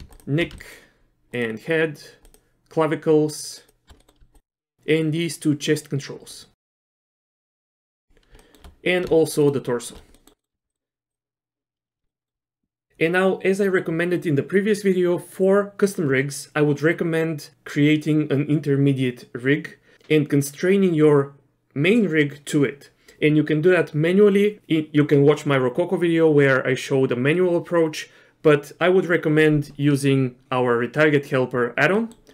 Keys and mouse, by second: 0.6 shift+click, 3.6 shift+click, 4.0 middle click, 4.8 middle click, 5.3 shift+click, 5.7 middle click, 6.2 middle click, 6.4 shift+middle click, 7.4 shift+middle click, 8.4 shift+middle click, 9.4 shift+click, 10.1 middle click, 10.4 middle click, 10.7 middle click, 12.1 shift+click, 12.1 shift+middle click, 32.1 middle click.